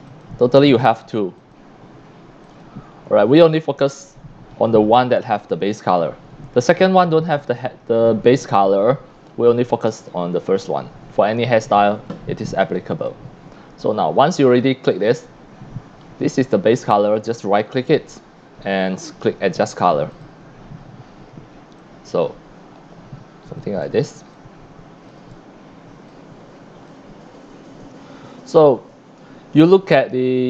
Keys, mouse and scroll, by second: 0.1 click, 0.8 click, 1.4 click, 2.4 click, 4.0 click, 9.3 click, 9.8-11.4 drag, 12.0-12.4 scroll up 3, 12.7 x, 13.0 x, 13.1-14.2 drag, 13.9 c, 17.1 right click, 20.1 click, 21.8-23.6 drag, 23.8 scroll down 1, 24.3 x, 24.3-25.1 drag, 25.3 scroll up 1, 26.0 x, 26.1 click, 27.2-27.5 scroll down 1.